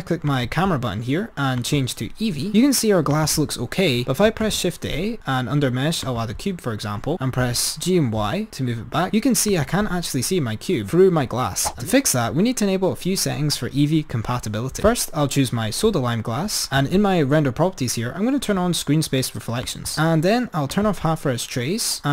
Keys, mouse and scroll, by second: 0.5 click, 1.8-2.6 drag, 4.7 shift+a, 7.2 g, 11.9 click, 14.9 click, 16.8-18.2 drag, 21.0 click.